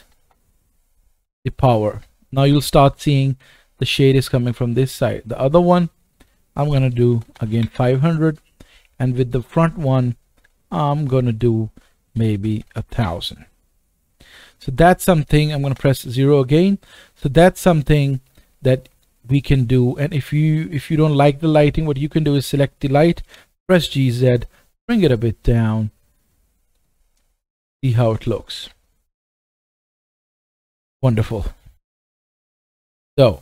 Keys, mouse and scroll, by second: 0.2 KP_0, 5.2-6.1 drag, 7.2 KP_0, 9.4-11.0 drag, 12.5 KP_0, 15.7 KP_0, 17.1-17.8 scroll up 1, 17.8 scroll up 1, 17.8 shift+middle click, 18.4-19.4 middle drag, 19.4-19.8 scroll down 1, 21.5 scroll down 1, 22.2 middle click, 22.5 click, 23.3-30.6 right drag, 23.3 g, 27.7 KP_0, 29.7 KP_0, 30.6 click, 30.6 scroll down 1, 30.7 right drag, 30.7 middle click, 31.0-31.4 drag, 31.4 middle click, 31.5 click, 31.7 scroll down 1, 32.2-33.0 shift+middle drag.